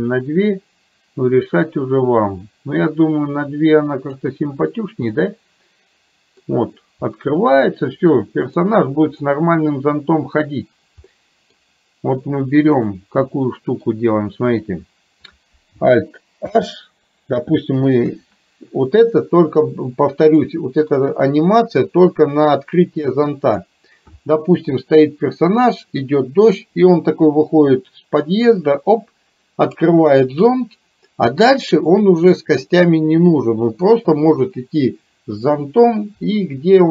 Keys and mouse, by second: 5.2-6.5 middle drag, 7.2-8.6 middle drag, 11.1-11.6 middle drag, 12.8 drag, 13.3-14.0 middle drag, 16.5 alt+h, 18.1 KP_4, 20.8-24.0 drag.